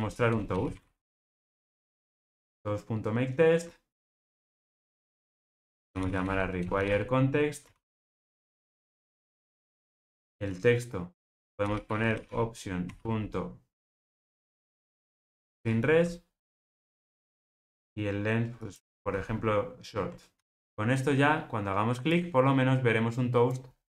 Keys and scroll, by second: 1.7 Return, 8.2 Return, 15.4 Return, 20.3 ctrl+r.